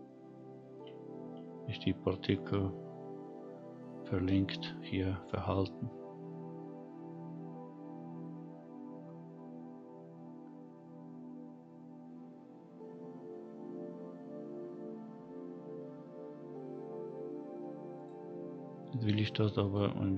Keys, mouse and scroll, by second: 0.0-0.8 shift+middle drag, 1.0 scroll up 1, 2.5 scroll up 1, 3.6-4.1 scroll down 2, 4.5 scroll up 1, 6.8 scroll up 1, 9.1 scroll down 1, 18.0 click, 18.7-19.6 scroll down 2, 19.6 click.